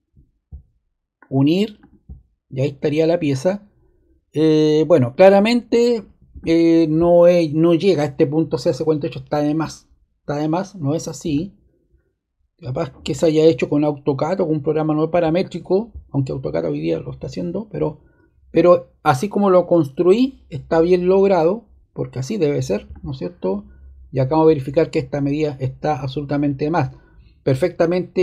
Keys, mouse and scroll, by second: 1.7-2.8 drag, 6.4-7.6 drag, 11.3-12.4 drag, 16.5-17.6 drag.